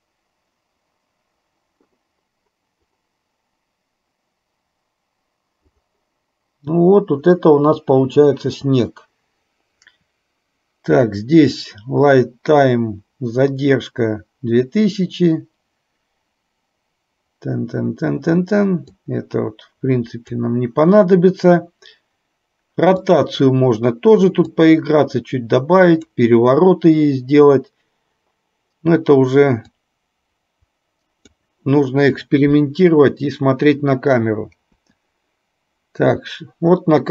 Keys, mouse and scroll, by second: 19.1-20.5 drag, 23.3 click, 24.6-26.4 drag, 29.9-31.6 drag, 34.9 KP_0.